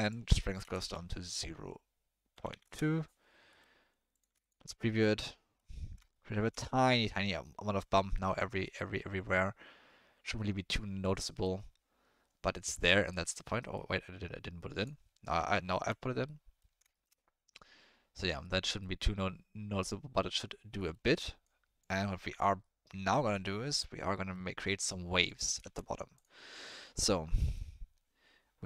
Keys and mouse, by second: 0.1-2.6 drag, 3.5 middle click, 4.1 click, 4.4 ctrl+shift+click, 5.0 click, 5.1-5.6 middle drag, 6.1-6.4 shift+middle drag, 8.6-9.3 middle drag, 11.2 middle drag, 13.1 click, 13.7-14.8 drag, 15.4 ctrl+middle drag, 16.2-16.7 middle drag, 16.9 shift+click, 18.4-18.8 drag, 20.7 click, 21.6 click, 24.2 click, 24.6 click, 25.2 click, 25.6 shift+a.